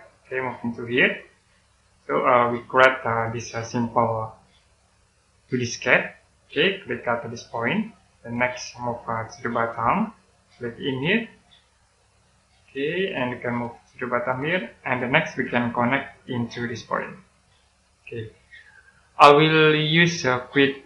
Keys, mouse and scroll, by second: 13.1 click, 15.2-16.4 scroll up 1, 16.4 click, 17.9 scroll down 1, 18.4 middle click, 20.3 click.